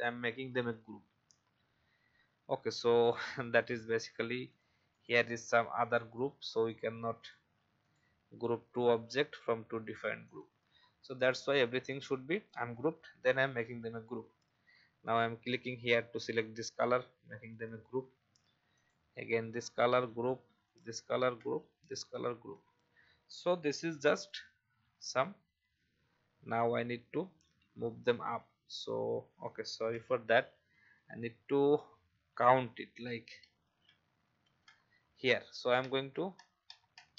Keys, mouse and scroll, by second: 0.5 ctrl+g, 2.9 click, 4.1 v, 4.5 click, 5.8 right click, 6.6 click, 13.6 ctrl+g, 15.0 click, 17.6 ctrl+g, 18.7 click, 19.4 ctrl+g, 20.6 click, 21.1 ctrl+g, 21.8 click, 22.3 ctrl+g, 23.8 v, 24.2-26.0 drag, 26.0-27.6 typing, 30.6 typing, 32.4 ctrl+z, 34.4 ctrl+z, 35.9 Up, 36.4 Up, 36.7 Up, 36.9 Up, 37.1 Up.